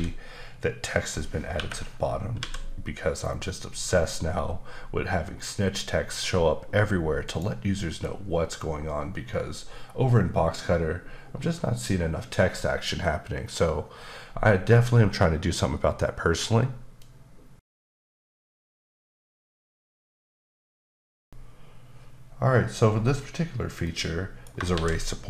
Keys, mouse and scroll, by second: 2.3 typing, 7.2 click, 24.7 shift+a.